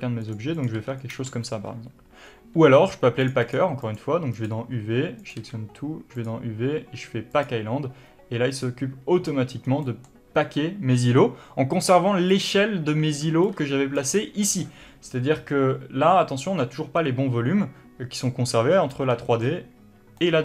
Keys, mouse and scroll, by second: 0.2 g, 0.9 click, 1.0 g, 1.5 click, 1.6 a, 3.5 click, 4.1 click, 4.6 click, 5.7 a, 6.5-10.1 drag, 10.0 scroll down 2, 10.1-12.6 middle drag, 11.6-12.6 scroll up 2, 12.6 click, 13.6 b, 15.4-16.6 scroll up 1, 19.2-20.4 middle drag.